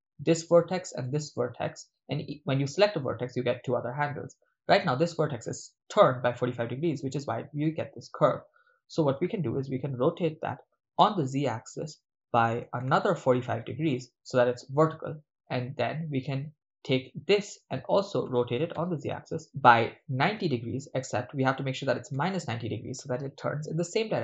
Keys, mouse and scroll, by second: 1.1 click, 1.1 right click, 9.6 r, 11.0 z, 12.8 4, 12.9 5, 13.8 Return, 17.0 right click, 18.2-20.0 typing, 22.1 -.